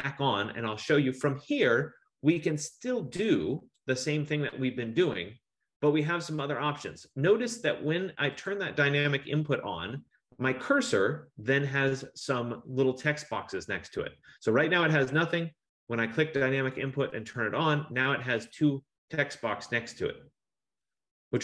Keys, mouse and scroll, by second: 3.8 click, 8.6 click, 16.9 click.